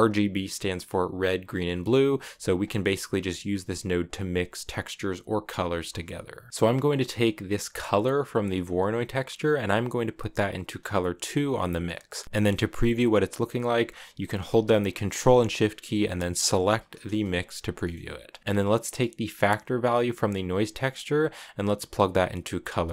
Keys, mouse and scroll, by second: 2.3-5.5 drag, 6.2-8.4 middle drag, 8.4 click, 12.2 ctrl+z, 16.4 ctrl+shift+click, 17.2-17.6 drag, 17.6-19.4 middle drag, 20.6 click.